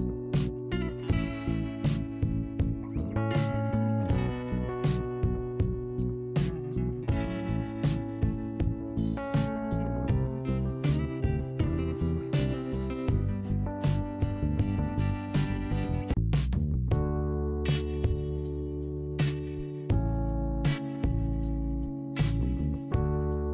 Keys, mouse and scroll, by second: 3.0 click, 3.7-4.0 scroll down 1, 8.5 click, 14.7 scroll down 1, 16.1 5, 17.5 5, 18.1 click, 20.5 click.